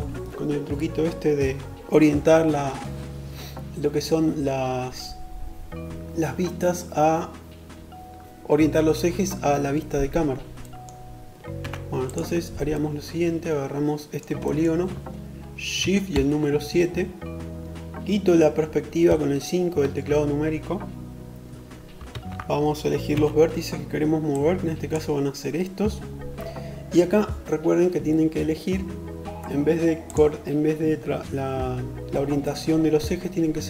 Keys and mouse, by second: 10.4 3, 11.0-23.2 middle drag, 14.9 shift+KP_7, 18.0 KP_5, 21.0 alt+z, 22.0 1, 23.2-33.6 drag.